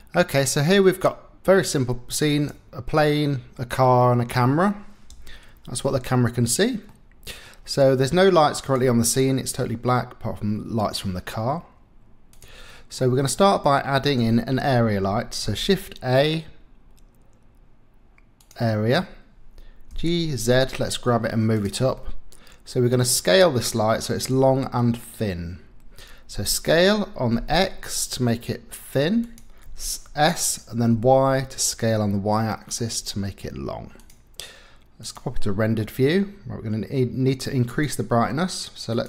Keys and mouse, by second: 0.0-1.7 middle drag, 2.3 click, 4.0 middle click, 5.1 KP_0, 7.4 middle click, 12.3 click, 13.0 click, 15.4 shift+a, 19.9 g, 20.4 z, 22.0-23.4 drag, 26.3 s, 27.4 x, 29.6 s, 30.9 y, 34.0-35.3 drag, 35.8 middle click, 37.7 click, 38.9-39.0 drag.